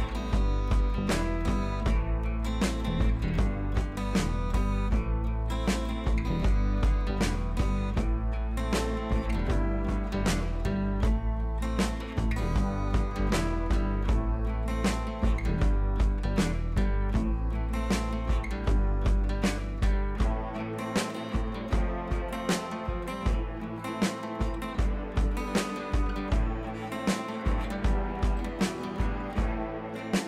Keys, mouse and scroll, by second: 6.8-9.4 drag, 12.3 ctrl+z, 13.0-18.4 drag, 16.8-18.5 drag, 23.2 click, 24.6-24.9 click, 26.6-27.8 drag, 28.0 ctrl+c, 29.2-29.6 click, 30.0 t.